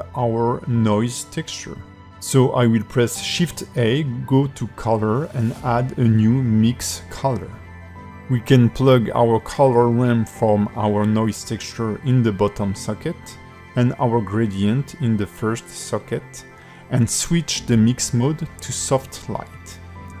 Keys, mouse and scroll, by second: 7.7 click, 13.4 click.